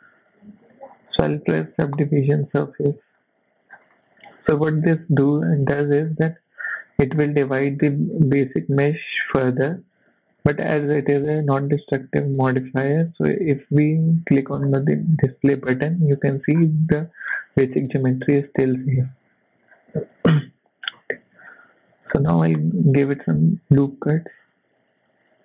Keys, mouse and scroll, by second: 0.7 click, 1.6 click, 3.3-3.9 scroll down 4, 3.9 middle click, 4.6 shift+middle click, 5.8 middle click, 6.1-6.6 scroll up 2, 7.2-7.6 scroll up 3, 7.5 middle click, 7.8-8.1 scroll down 4, 8.1 shift+middle click, 8.8-9.2 scroll down 4, 9.6 scroll up 2, 10.0 shift+middle click, 13.2 click, 14.6 scroll down 2, 15.2 middle click, 16.6 scroll up 3, 17.0 shift+middle click, 17.3 scroll up 2, 17.7 middle click, 19.3 click, 19.7-20.0 scroll down 3, 20.1 KP_1, 20.8 scroll up 1, 21.0 shift+middle click, 21.5 Tab, 22.1 shift+middle click, 22.5 scroll up 3, 23.4 ctrl+r.